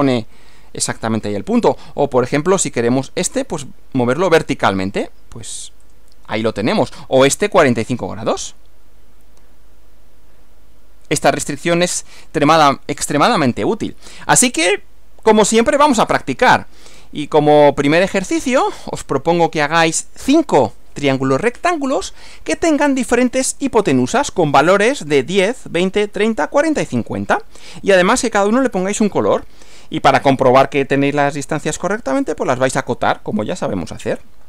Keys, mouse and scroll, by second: 3.6 click, 5.9 click, 8.0 click, 11.8 click, 12.7 click, 16.3-18.8 drag, 23.5 click.